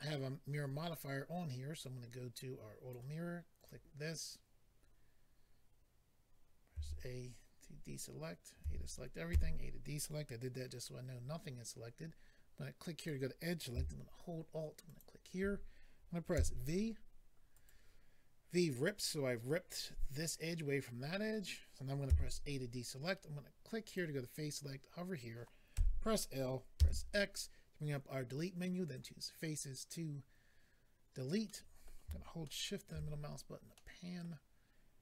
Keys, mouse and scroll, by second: 1.8 click, 3.6 click, 3.7 click, 6.7 a, 9.3 a, 12.9 click, 13.1 click, 14.8 alt+click, 16.3 v, 17.5 right click, 22.1 a, 23.9 click, 25.7 l, 26.8 x, 28.8 click, 29.0 click, 31.5 middle click, 32.4 shift+middle click, 32.9 middle click, 33.1-33.8 scroll up 3, 33.8 middle click.